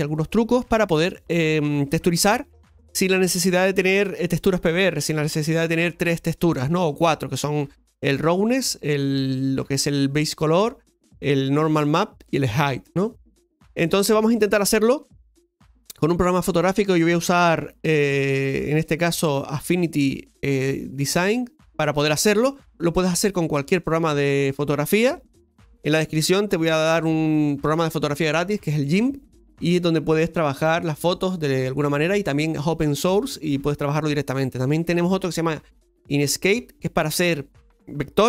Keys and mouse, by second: 1.1-14.2 shift+middle drag, 14.6 middle click.